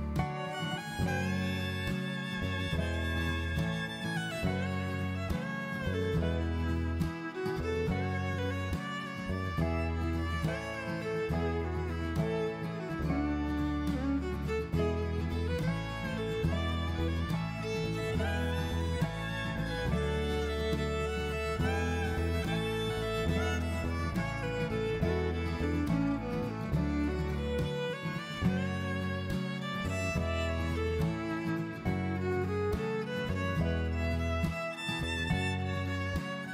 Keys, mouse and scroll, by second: 6.1 alt+click, 8.0 click, 10.8 middle click, 13.9 click, 14.6 middle click, 16.6 i, 20.6 middle click, 24.0 alt+click, 25.0 middle click, 28.7 middle click, 31.1 click, 32.9 ctrl+z, 34.3 ctrl+z.